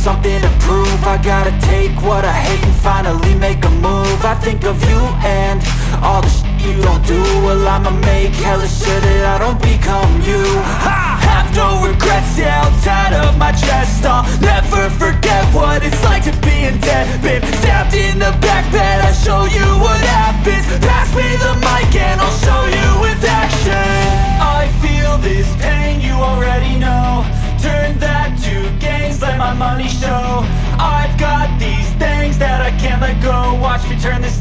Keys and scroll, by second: 5.1 ctrl+c, 8.6 Right, 8.9 ctrl+Delete, 9.0-10.4 typing, 11.1 ctrl+s, 12.2 Delete, 12.4 y, 14.6 Delete, 15.1 shift+y, 16.6 Return, 18.1 BackSpace, 19.1 ctrl+s, 22.0 ctrl+c, 24.2 Delete, 24.5 y, 26.2 Delete, 26.6 y, 27.8 BackSpace, 28.0 y, 28.4 ctrl+s.